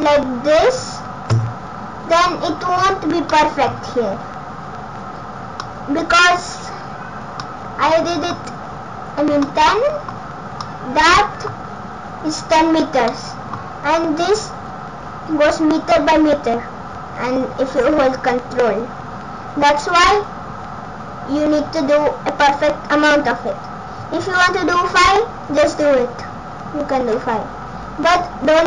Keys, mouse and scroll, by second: 2.1-2.5 scroll up 4, 2.8-3.5 scroll down 5, 3.3 middle click, 4.0 scroll up 3, 5.6 middle click, 7.3 scroll up 1, 7.4 middle click, 8.4 scroll down 1, 9.4 middle click, 9.4 scroll down 3, 10.2 scroll up 2, 10.6 middle click, 13.1 middle click, 19.4-20.5 scroll down 2, 26.1-26.8 scroll up 6, 27.1 scroll down 3.